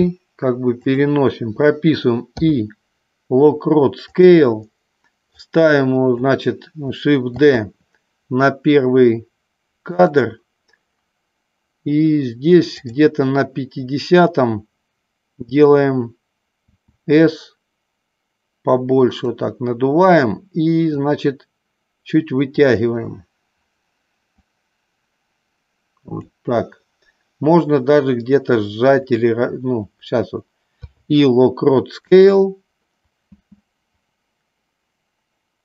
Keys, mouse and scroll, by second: 2.4 i, 5.6 click, 7.3 shift+d, 13.0 click, 16.6 s, 19.3 click, 21.0-22.8 drag, 24.5-26.4 drag, 30.8 i, 33.6 space.